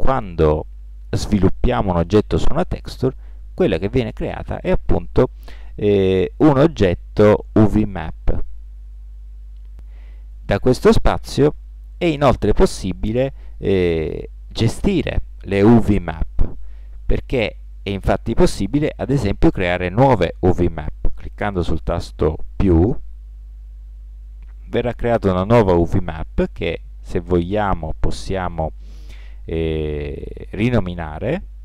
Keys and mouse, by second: 5.7 click, 22.7-24.5 drag, 24.5-25.9 middle drag, 25.9-27.9 drag, 27.9 middle click.